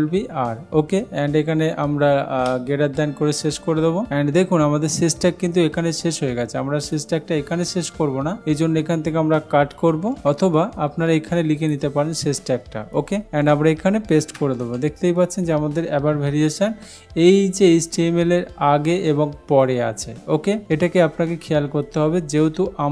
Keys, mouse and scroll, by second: 0.0-0.8 typing, 2.9 shift+., 7.1 click, 10.2 ctrl+x, 11.7-12.7 drag, 14.7 ctrl+v.